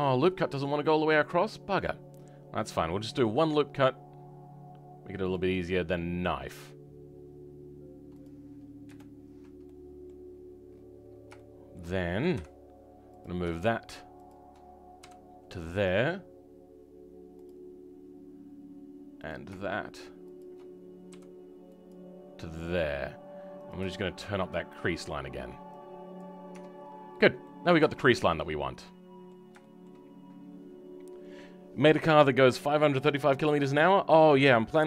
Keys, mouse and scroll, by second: 9.1-9.6 scroll up 1, 9.6 middle click, 10.2-11.0 scroll up 10, 11.0 scroll down 3, 11.3-12.3 right drag, 11.3 shift+middle click, 12.3 w, 13.1 click, 17.4 m, 19.2 click, 21.8 m, 22.3 scroll down 3, 22.8-23.6 scroll up 1, 23.6 click, 25.7 click, 26.4 Tab, 26.6-27.3 scroll down 12, 27.3-29.6 middle drag, 29.6-34.8 drag.